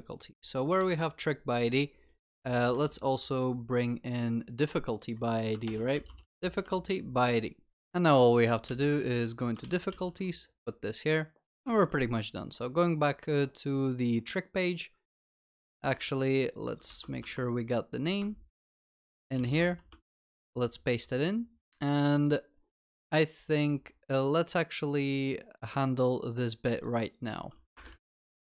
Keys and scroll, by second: 0.9 ctrl+b, 2.5 ctrl+v, 5.6 ctrl+BackSpace, 6.5 ctrl+s, 8.7 ctrl+c, 10.1 ctrl+s, 11.7 ctrl+Tab, 15.8 ctrl+Tab, 17.2 ctrl+c, 17.3 ctrl+Tab, 20.2 ctrl+v, 20.4 ctrl+s.